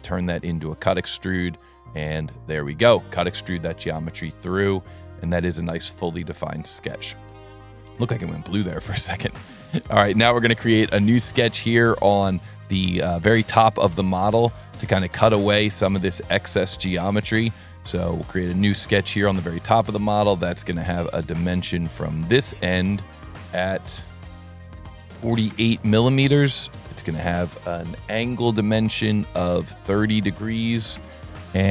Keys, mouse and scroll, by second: 1.7 click, 4.5 click, 7.3-8.4 middle drag, 9.4 s, 9.9 click, 11.0 s, 11.8 click, 13.4 click, 14.7 click, 15.7 click, 17.0 click, 18.0 click, 19.1 s, 20.4 click, 22.1 click, 23.2 click, 24.2 click, 26.7 click, 29.3 click.